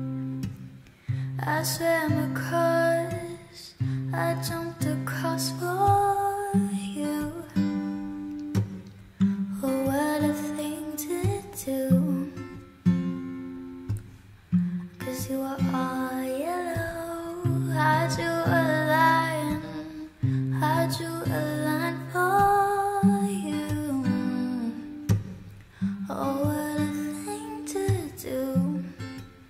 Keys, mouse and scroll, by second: 6.0 F9.